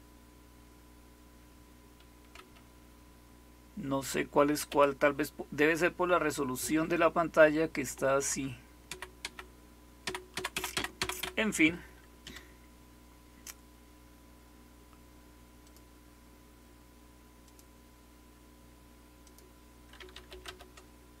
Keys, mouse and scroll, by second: 2.3 Right, 4.6 Right, 8.1 Left, 8.8 Left, 9.1 Left, 10.0 Left, 10.3 Left, 10.6 Left, 12.1 Escape, 15.5 click, 17.3 click, 19.1 click, 19.8-21.2 typing.